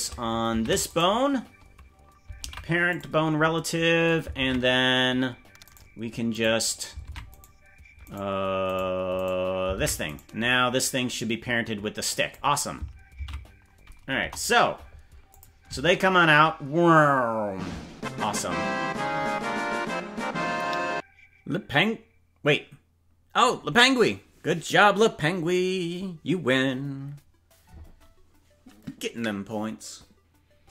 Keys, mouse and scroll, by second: 0.6 ctrl+Tab, 1.0 right click, 2.4 ctrl+p, 4.4 ctrl+Tab, 5.7-6.9 right drag, 7.0 ctrl+Tab, 8.1 right click, 9.2 right click, 9.8 ctrl+Tab, 10.2 right click, 10.8-12.3 drag, 13.3 ctrl+z, 14.2 KP_0, 15.3 click, 15.8 space, 16.2-16.6 scroll down 4, 17.7 space.